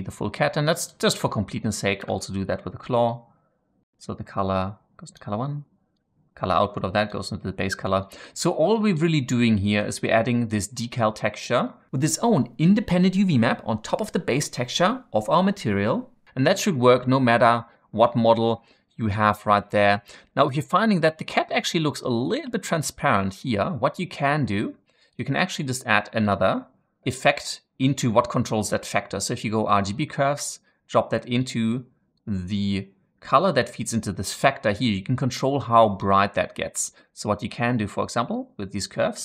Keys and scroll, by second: 1.9 ctrl+v, 25.3 shift+a, 27.0 typing.